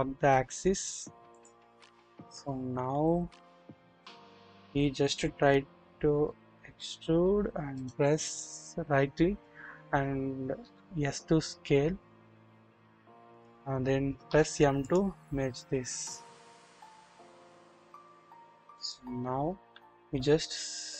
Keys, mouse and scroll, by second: 1.7-2.0 scroll up 1, 2.4 scroll down 1, 3.1 scroll up 1, 6.6 e, 7.7 right click, 10.5 s, 10.6 s, 14.2 typing, 15.7 scroll down 1, 17.3 typing, 17.7-19.0 drag, 19.9-20.9 scroll up 1.